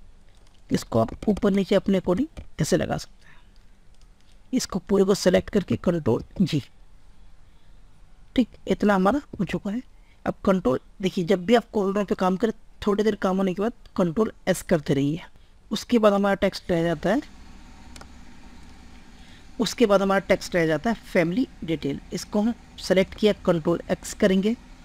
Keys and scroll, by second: 6.3 ctrl+g, 9.2 ctrl+s, 23.5 ctrl+x.